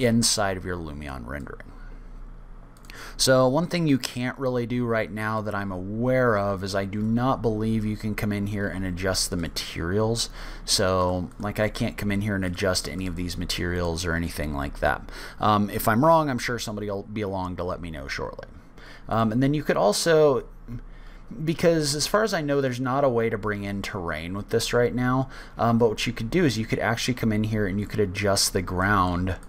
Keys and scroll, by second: 3.1-3.8 typing, 7.4 o, 8.8 o, 26.2 o.